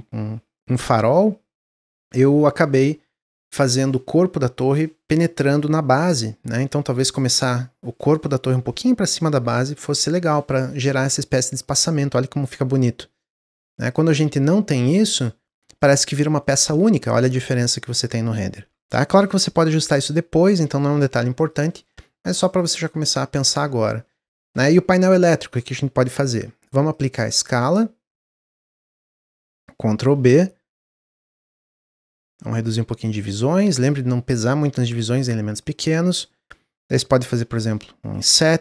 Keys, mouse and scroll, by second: 11.1 drag, 12.7 click, 13.9-14.8 drag, 15.7-16.3 drag, 16.3-19.3 middle drag, 21.4 click, 22.4 drag, 22.7-23.1 middle drag, 23.1 Tab, 23.4-25.4 middle drag, 25.4-25.8 scroll up 2, 25.8-26.1 scroll down 1, 26.3 Tab, 26.8-28.8 drag, 28.8 Tab, 29.9 ctrl+b, 31.4 scroll up 3, 32.3-35.3 drag, 35.5 click.